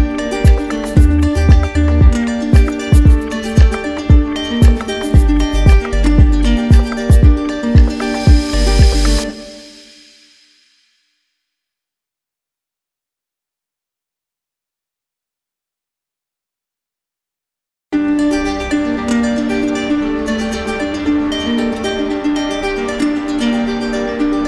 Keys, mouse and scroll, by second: 0.2 right click, 0.6 alt+right click, 2.3 alt+right click, 2.9 right click, 4.1-5.0 typing, 7.2 right click, 7.9 z, 8.7 click, 9.7 right click, 11.0 click, 11.8 right click, 14.6 ctrl+click, 16.8 click, 18.0 right click, 19.3 ctrl+click, 20.6 click, 21.3 right click, 22.3 right click, 22.8 right click.